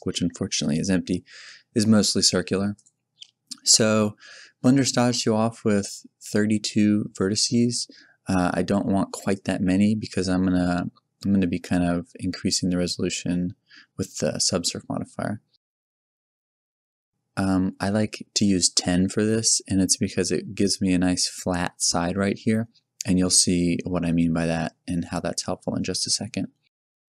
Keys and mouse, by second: 9.3 click, 10.1-11.1 drag, 25.9 click, 26.1-27.0 middle drag.